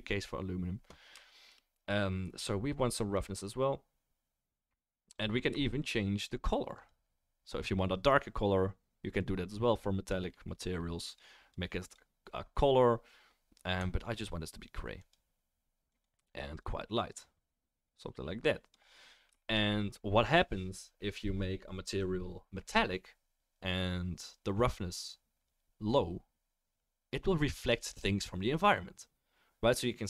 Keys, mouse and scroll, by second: 6.9-19.3 right drag, 19.3-30.0 shift+middle drag.